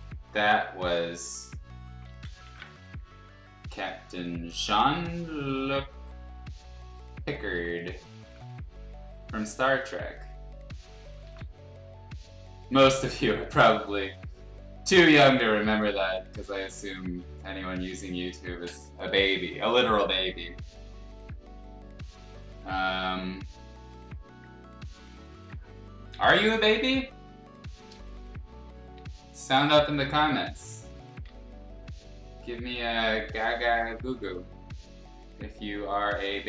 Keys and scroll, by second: 2.0 ctrl+z, 2.4 ctrl+z, 6.6 ctrl+z, 7.5 ctrl+z, 8.2 ctrl+z, 11.2 ctrl+z, 13.2 ctrl+z, 15.3 x, 17.2 x, 17.8 ctrl+z, 18.5 ctrl+z, 19.2 [, 21.1 ctrl+z, 28.6 ], 31.2 ctrl+z, 36.2 ctrl+z.